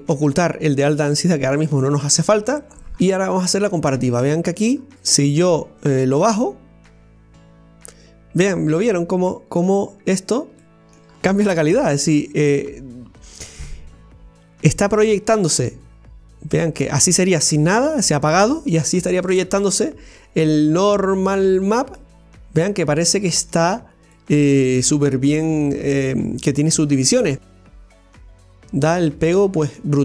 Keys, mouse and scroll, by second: 0.6 click, 2.7-3.4 scroll up 2, 3.4-6.0 middle drag, 6.0-8.8 drag, 10.1-10.5 scroll up 2, 10.6-11.1 shift+middle drag, 11.1-12.3 scroll up 1, 13.0-13.8 scroll up 1, 15.1-19.3 drag, 21.4-22.0 scroll down 1, 22.0-23.8 middle drag, 23.8-24.1 scroll up 1, 24.1-28.8 middle drag, 28.8 scroll down 1, 29.1-30.0 middle drag.